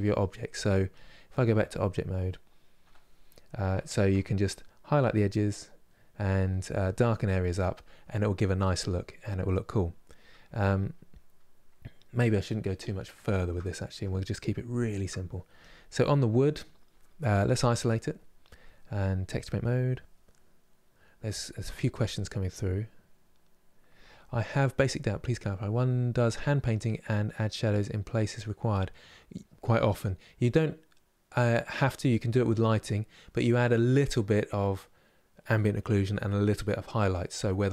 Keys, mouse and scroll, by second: 1.5-2.6 drag, 2.6 KP_Divide, 3.0-15.3 middle drag, 15.3 click, 15.7-17.5 middle drag, 17.5 KP_Divide, 17.9-19.6 middle drag, 19.6-37.7 drag.